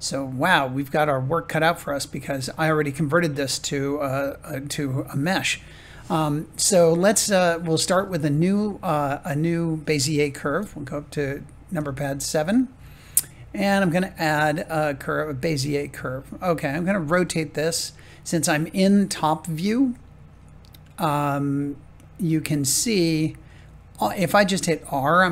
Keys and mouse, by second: 8.1-15.2 shift+middle drag, 23.0 shift+middle click, 24.6 r.